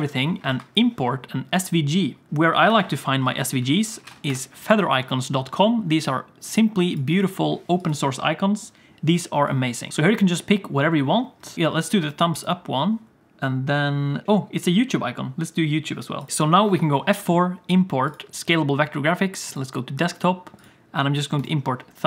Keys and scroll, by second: 0.4 F4, 16.6 F4.